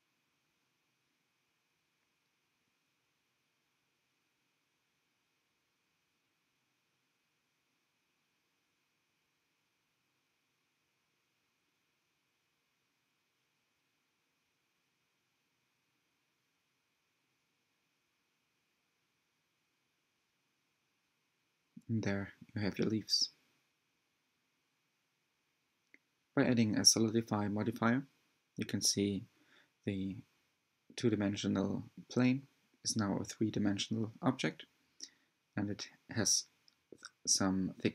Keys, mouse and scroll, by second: 0.3 g, 2.1-3.6 middle drag, 3.6-4.1 scroll up 1, 4.1 click, 4.4 g, 5.2 click, 5.5 g, 6.1 click, 6.3 g, 6.9 click, 7.1 g, 7.8 click, 8.1 g, 8.9-10.4 middle drag, 11.2 click, 12.4 g, 14.6 shift+click, 15.5 g, 17.4-18.6 middle drag, 18.6 alt+z, 18.9-21.5 middle drag, 21.5 scroll down 2, 21.7 middle click, 22.3 Tab, 24.4 click, 24.8 scroll up 2, 25.1-25.9 middle drag, 25.9-26.8 scroll up 1, 26.8 click, 27.6 right drag, 27.9-29.0 middle drag, 29.0 scroll down 2, 29.2-31.0 middle drag, 31.0 scroll down 2, 31.1-33.6 middle drag, 33.6 Tab, 33.9 shift+middle click, 34.7-35.3 scroll up 1, 35.6 shift+click, 37.1 shift+click, 37.5 shift+click.